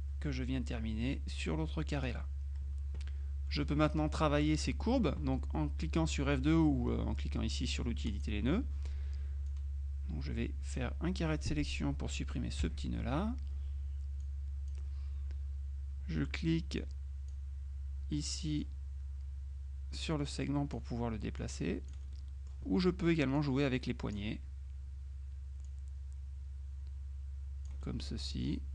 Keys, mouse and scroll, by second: 8.2 click, 9.6-12.8 drag, 12.7 Delete, 14.3-15.3 drag, 16.9-17.9 drag, 18.3 middle click, 20.0-21.3 drag, 21.5 click, 22.2 middle click, 23.5 click, 25.7-28.3 drag.